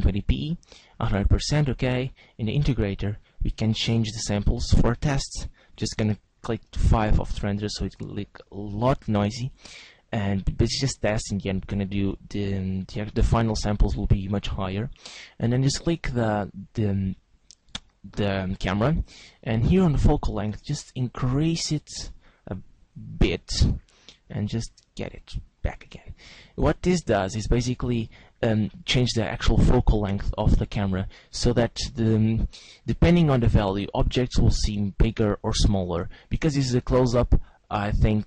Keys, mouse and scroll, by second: 2.9 click, 5.5 click, 15.6 right click, 18.5 click, 20.0 click, 23.7 g, 26.0 click.